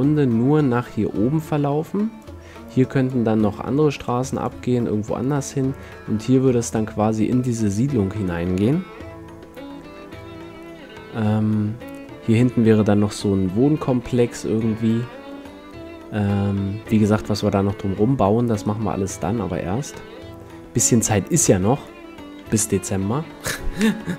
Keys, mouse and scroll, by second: 1.0 middle click, 1.0-8.3 d, 1.5-2.9 drag, 9.0-12.1 middle drag, 9.0 KP_5, 18.3 d, 18.7-20.6 drag, 18.7 d, 22.1 d.